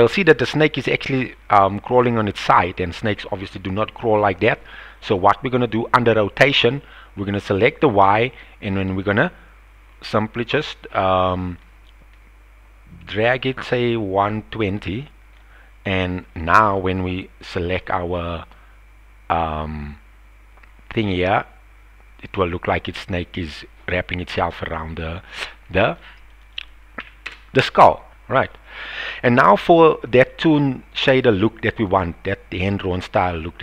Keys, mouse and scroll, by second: 0.1-0.8 middle drag, 1.2-2.5 middle drag, 2.9 middle click, 4.4 middle click, 7.9-15.4 drag, 17.5-25.9 drag, 26.2-27.7 drag, 28.1 middle click, 28.9 KP_1, 30.1-30.6 shift+middle drag, 31.7 click.